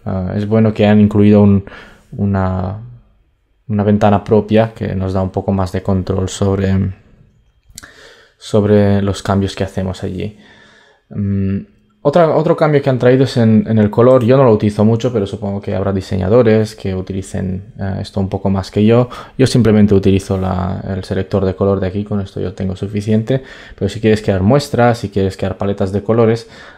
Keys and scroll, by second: 7.0 super+d.